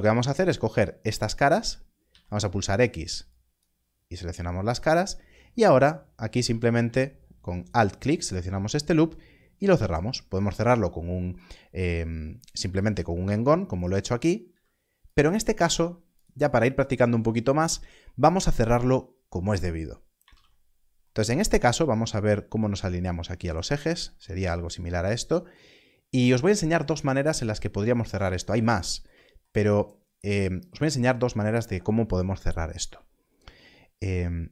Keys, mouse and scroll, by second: 2.0 z, 3.3 click, 6.3 2, 7.6 alt+click, 11.2 f, 12.6 s, 13.7 click, 14.5 s, 15.0 click, 15.5 g, 15.6 z, 20.3 alt+a, 21.2-21.7 scroll down 1, 25.7 scroll up 1.